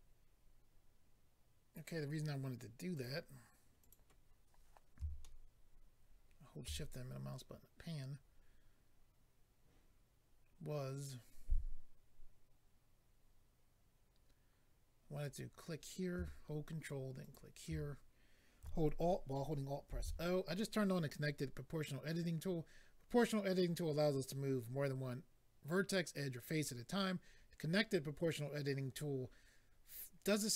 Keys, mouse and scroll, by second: 2.9 click, 3.0 click, 3.8 click, 5.2 shift+middle click, 15.2 click, 15.3 click, 17.2 ctrl+click, 17.3 ctrl+click, 19.9 alt+o.